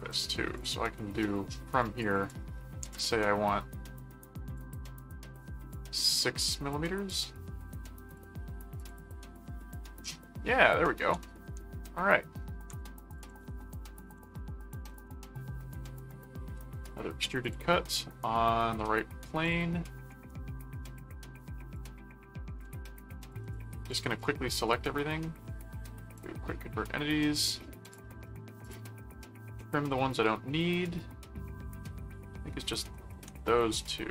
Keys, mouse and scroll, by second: 0.1 middle click, 0.5 click, 0.9 middle click, 1.8 click, 4.5 click, 7.1 click, 8.1 click, 8.8 click, 10.0 middle click, 10.9 middle click, 11.4 ctrl+4, 13.0-14.7 typing, 13.1 click, 14.9 Return, 17.4 click, 19.4 click, 20.1 right click, 21.7 click, 23.3 ctrl+click, 26.1 click, 27.0 middle click, 27.8 click, 28.6-32.8 drag, 33.9 ctrl+1.